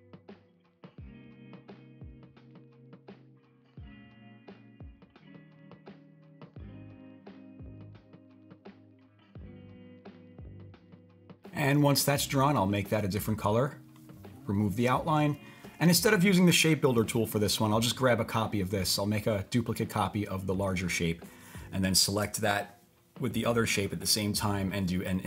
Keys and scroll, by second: 1.1 typing.